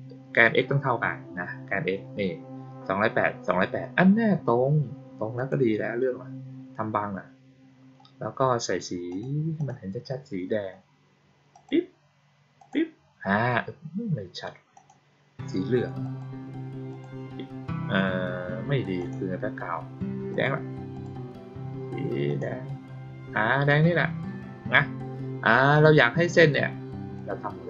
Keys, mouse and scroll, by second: 5.3 click, 5.8-6.5 scroll down 2, 6.5-7.2 scroll down 1, 7.2-8.2 scroll up 2, 9.0 click, 9.5 click, 11.4 click, 12.5 click, 14.7 click, 15.9 click, 16.8 click, 18.9 click, 20.2 click, 20.9 click, 22.2 click, 27.1-27.6 drag.